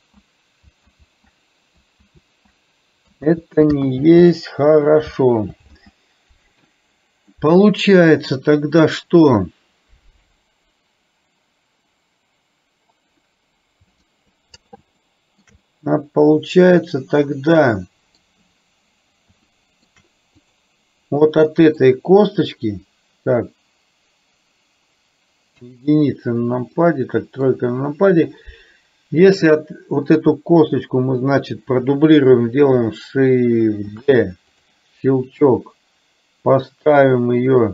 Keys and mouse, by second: 1.0 ctrl+z, 3.5 ctrl+z, 4.1 ctrl+z, 7.5 middle click, 15.1 shift+middle click, 15.7-18.2 middle drag, 19.5 shift+middle click, 20.5 click, 21.4 middle click, 25.6 KP_1, 26.7 middle click, 34.0 shift+d, 35.5-37.7 drag.